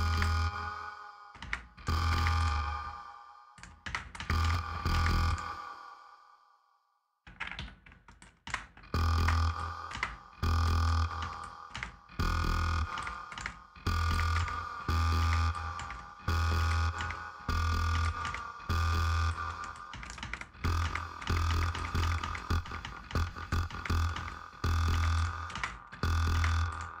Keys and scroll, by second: 1.1 space, 3.6 space, 7.3 Escape, 8.2 space, 10.9 space, 12.7 space, 19.6 space.